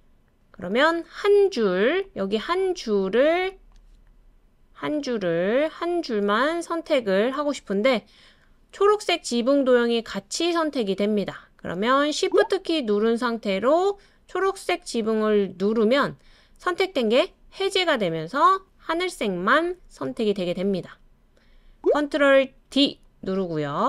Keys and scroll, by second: 22.7 super+d.